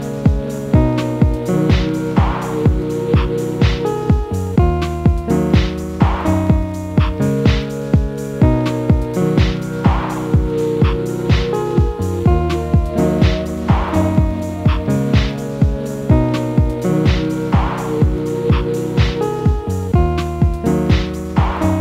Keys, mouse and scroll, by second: 20.4 Right.